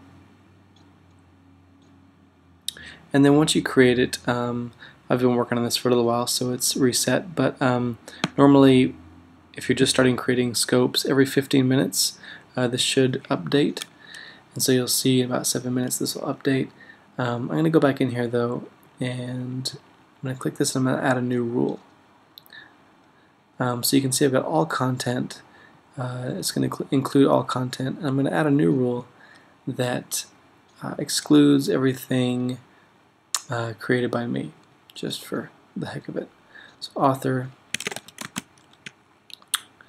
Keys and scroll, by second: 37.6-38.9 typing.